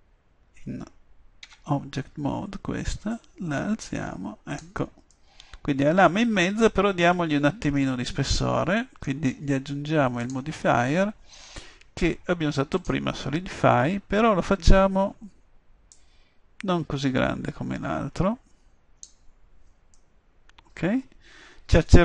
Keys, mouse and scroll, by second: 1.5 Tab, 3.1-4.9 drag, 5.3 middle click, 7.1 middle click, 7.9-9.4 middle drag, 10.3-12.1 drag, 16.0-17.8 middle drag, 20.0 middle click, 21.8-22.0 middle drag.